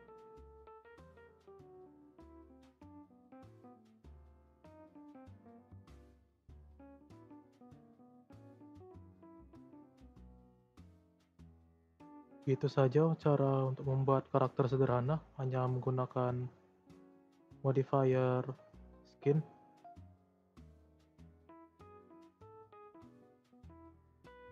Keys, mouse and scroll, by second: 2.0-3.3 shift+middle drag, 3.3 click, 3.9 scroll up 2, 4.5 r, 6.3-7.8 middle drag, 7.8 scroll down 2, 8.0 middle click, 8.3-8.6 scroll up 2, 9.1 click, 9.3-9.9 drag, 10.1 click, 10.6-11.0 shift+middle drag, 11.0 click, 11.9 scroll down 2, 13.7-14.2 scroll up 4, 14.2 scroll down 2, 15.3-18.4 drag, 19.1 click, 19.4 scroll up 1, 19.5-19.9 middle drag, 19.9 click, 20.3 shift+s, 20.8 scroll down 2, 21.2 click, 21.5-22.4 middle drag, 22.4 scroll up 2, 23.1-24.5 middle drag.